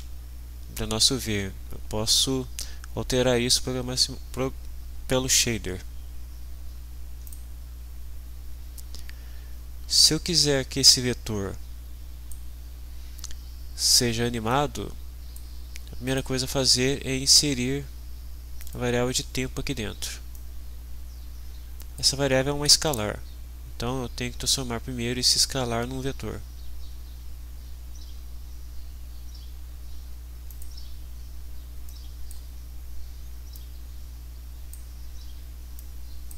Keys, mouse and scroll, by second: 7.3 click, 10.9-12.5 drag, 14.5-15.5 drag, 16.1 right click, 18.6 click, 20.3-22.1 drag, 22.9 right click, 30.5 click, 31.9-32.5 drag, 33.5-34.9 drag, 35.8-36.3 drag.